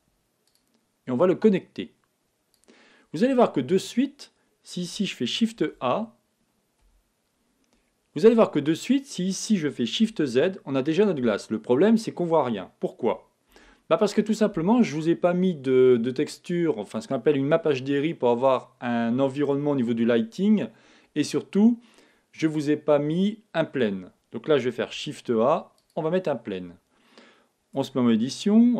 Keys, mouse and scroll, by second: 1.2-3.1 drag, 23.2-25.3 middle drag, 27.7 Tab.